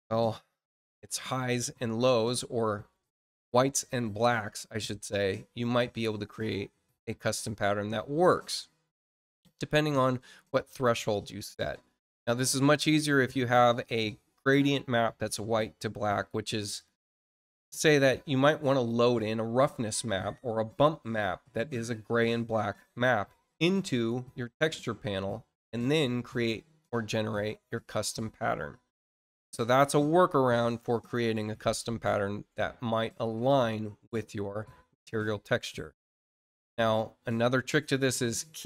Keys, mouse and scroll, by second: 5.7-8.2 drag, 16.7 click, 23.8 click.